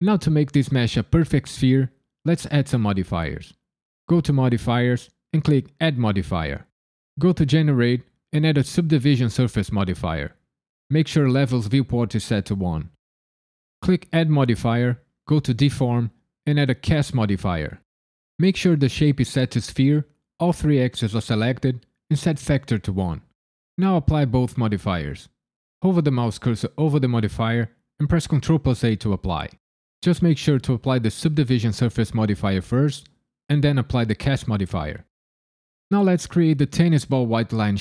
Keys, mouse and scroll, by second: 4.1 click, 5.7 click, 13.9 click, 21.3 click, 30.7 ctrl+a, 33.9 ctrl+a.